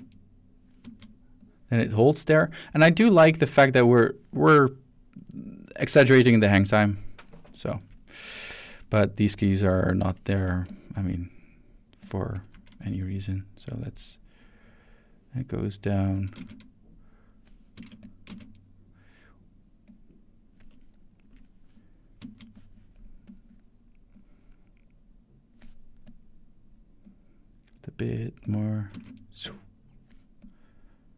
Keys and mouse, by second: 0.8 space, 1.4-2.5 drag, 3.6-7.6 drag, 9.6-10.0 drag, 10.4 x, 10.7 click, 12.0 click, 12.5 x, 12.8 click, 13.7-16.2 drag, 16.4 space, 17.7 space, 18.0 click, 18.3 space, 19.9 click, 20.9 shift+middle drag, 22.2 shift+space, 23.3 click, 24.1-25.6 drag, 26.0 click, 27.0-28.0 drag, 28.4 click, 28.9 space, 30.4 click.